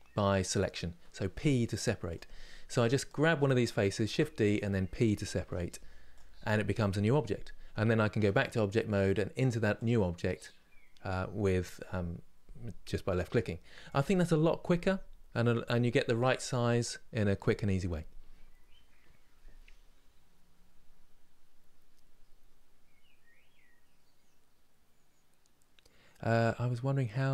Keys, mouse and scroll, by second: 3.8 shift+d, 5.9 p, 7.9 Tab, 8.7 click, 9.5 click, 12.9 Delete, 13.6 click.